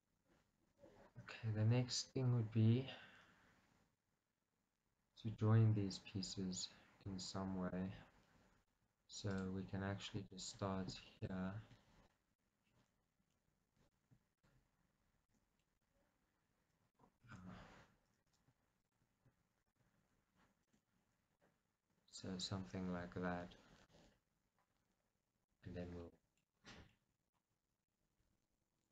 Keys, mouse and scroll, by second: 7.4-9.4 middle drag, 7.4-7.8 scroll down 2, 9.4 click, 10.5 shift+click, 12.2-14.4 middle drag, 12.5-13.3 scroll up 2, 13.3 scroll up 1, 14.4 shift+click, 15.4 f, 15.6-18.9 middle drag, 17.2 ctrl+z, 17.6-18.9 scroll up 2, 18.9 shift+click, 19.7 shift+click, 20.7 f, 21.1-21.4 scroll down 2, 21.4-28.9 middle drag, 26.7 scroll down 2, 27.7 scroll down 2.